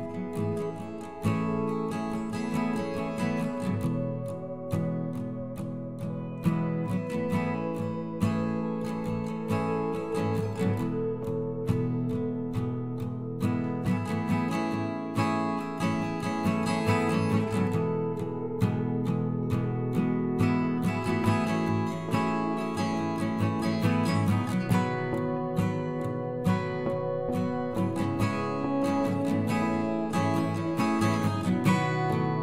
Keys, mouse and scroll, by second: 0.7 middle click, 1.5 middle click, 5.5-6.6 ctrl+KP_Add, 6.7 ctrl+KP_Add, 7.4 x, 10.8-12.1 middle drag, 12.1 click, 12.9 middle click, 13.3 middle click, 13.7 click, 14.1 click, 14.2 middle click, 14.7 click, 14.8 middle click, 15.0-16.1 middle drag, 23.4 f, 29.8 middle click, 30.1 middle drag, 30.3 middle click.